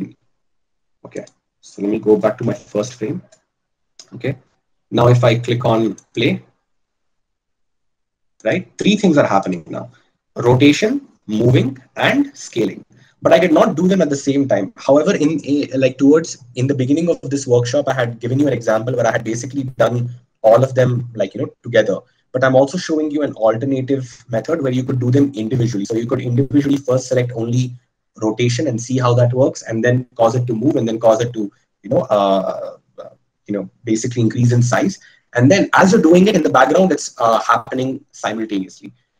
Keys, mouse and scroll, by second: 4.2 KP_Divide, 6.7-15.8 drag.